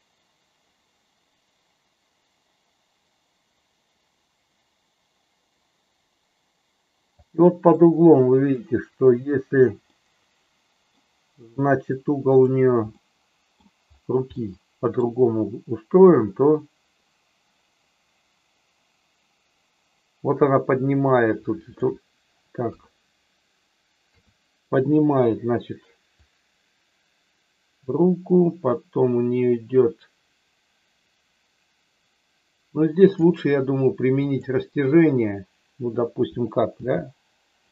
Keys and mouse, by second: 7.7 middle click, 9.9-10.9 middle drag, 12.2 click, 12.9 middle click, 14.2 middle click, 16.1-21.9 drag, 22.6 KP_3, 26.1-33.1 drag, 34.3 click, 36.7 g, 37.6 click.